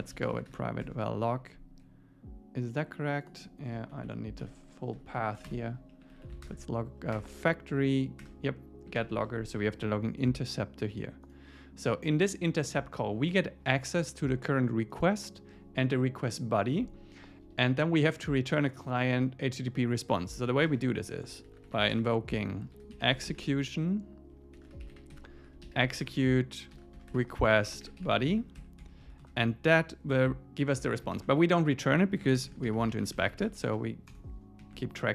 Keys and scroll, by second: 0.8 Tab, 3.9 alt+shift+Left, 5.9 Right, 6.4 alt+Return, 7.2 Return, 8.3 Return, 9.0 super+s, 20.6 shift+super+Left, 26.0 Return, 28.6 ↺, 29.2 super+Left, 31.1 alt+shift+Right, 34.6 Up.